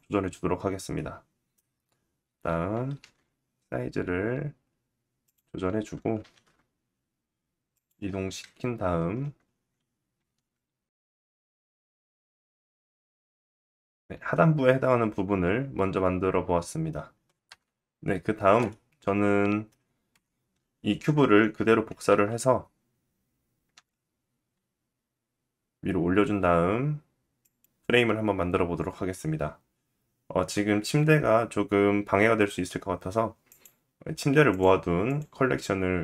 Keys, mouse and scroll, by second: 1.2 scroll down 2, 2.5 scroll down 1, 2.5 s, 5.7-11.4 middle drag, 5.7 g, 7.9 KP_1, 8.8-9.7 scroll up 2, 9.7 s, 10.8 click, 10.9 right click, 11.4 s, 12.7 g, 13.1 s, 14.0 middle click, 17.0 g, 17.0 middle click, 17.6 KP_1, 18.2 middle click, 19.7 KP_1, 21.6 shift+d, 33.0 click, 34.0 click, 34.6 click, 35.6 click.